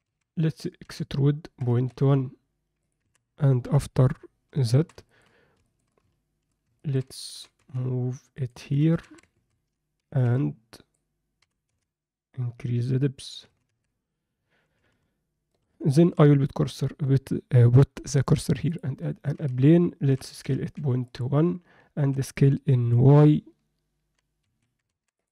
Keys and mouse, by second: 0.3 a, 0.8 e, 3.0 Tab, 3.6 KP_7, 4.6 alt+shift+middle drag, 5.1 ctrl+alt+middle drag, 5.6 shift+middle click, 6.8 ctrl+middle click, 7.3 g, 8.5 Tab, 8.8 z, 9.0 a, 10.1 b, 11.4 g, 13.4 z, 13.7 Tab, 15.5 shift+right click, 16.0 shift+a, 19.4 z, 20.0 s, 22.0 s, 24.9 Tab.